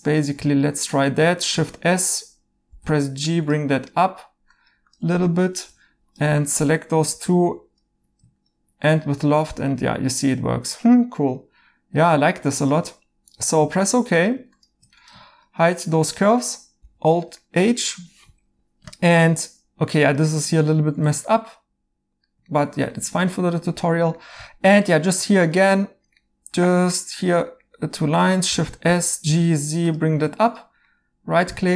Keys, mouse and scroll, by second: 0.7 right click, 1.5 s, 1.8 1, 2.6 g, 5.3 right click, 5.6 2, 7.1 i, 8.8 right click, 16.8 alt+h, 17.4 right click, 20.5 right click, 22.5 alt+h, 25.0 a, 26.2 right click, 27.5 right click, 28.5 s, 28.8 g, 29.7 z, 30.5 2, 30.8 right click.